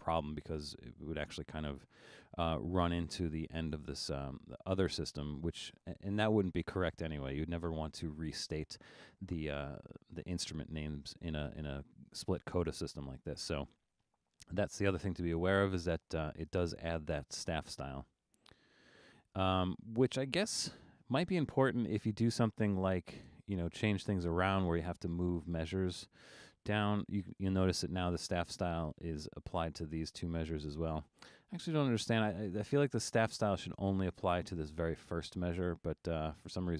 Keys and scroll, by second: 23.3 Down, 30.7 super+z.